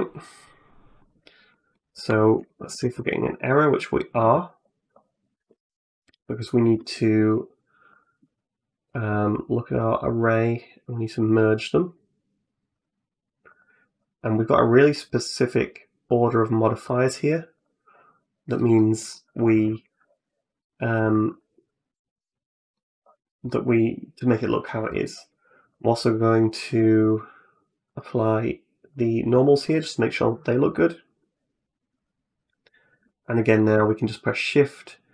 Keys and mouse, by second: 1.4 middle click, 2.0 shift+middle click, 2.3 middle click, 2.6 shift+middle click, 3.0 middle click, 3.6 middle click, 7.7 click, 8.1 click, 8.6 click, 9.5 click, 11.0 click, 12.5 click, 13.3 click, 14.9 click, 15.9 click, 16.7 click, 17.4 click, 18.4 middle click, 18.9 middle click, 20.8-22.6 middle drag, 23.3 middle click, 24.7 middle click, 26.7 click, 27.7 click, 28.8 click, 29.5-31.1 middle drag, 31.8 click, 32.8 click, 33.8-35.1 shift+drag.